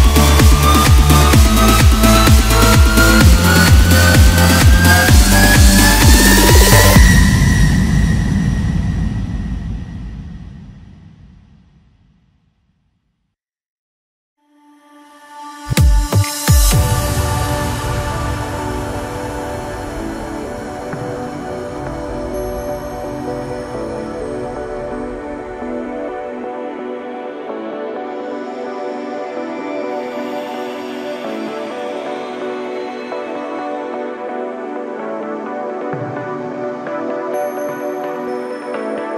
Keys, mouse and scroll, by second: 0.1 Tab, 0.6-3.1 middle drag, 4.6 click, 5.0-6.9 middle drag, 6.9-8.8 drag, 8.8-11.9 middle drag, 13.2-14.2 drag, 14.2-16.5 middle drag, 16.5-17.5 drag, 17.5 scroll up 3, 17.8 scroll down 2, 18.0 middle click, 18.5-18.9 scroll up 1, 18.9 Tab, 19.4-22.5 middle drag, 22.8 KP_7, 23.7 scroll up 1, 24.6 3, 25.3-26.2 scroll down 1, 26.2 click, 29.7 ctrl+KP_7, 30.6-31.4 scroll up 1, 31.4 1, 32.3 click, 33.6 shift+click, 34.9 shift+click, 36.0 shift+click, 37.4 s.